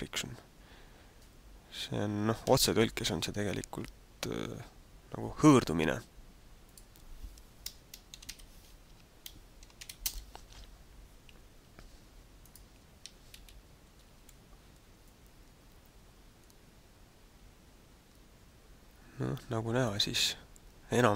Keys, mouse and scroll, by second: 6.8 click, 12.5 right click, 13.1 alt+a, 14.3 g.